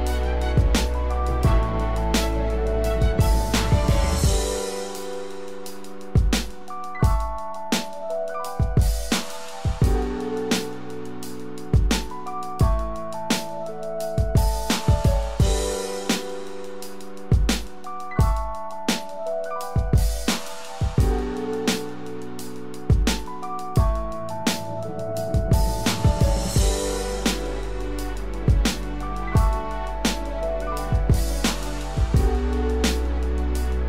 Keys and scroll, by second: 19.3 ctrl+-, 33.1 ctrl+-, 33.4 ctrl+=.